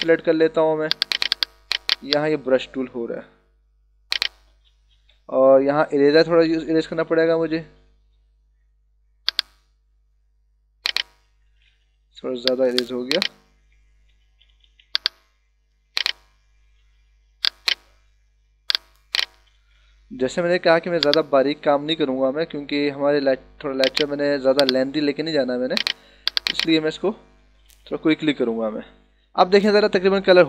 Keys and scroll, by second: 5.3 e, 6.8 [, 11.8 b, 14.3 [, 20.6 e, 24.3 b, 27.6 ctrl+-, 30.0 ctrl+=.